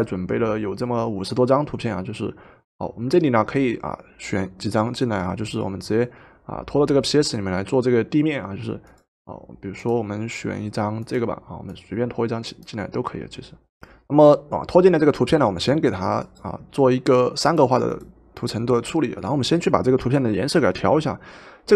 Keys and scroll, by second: 13.8 Return.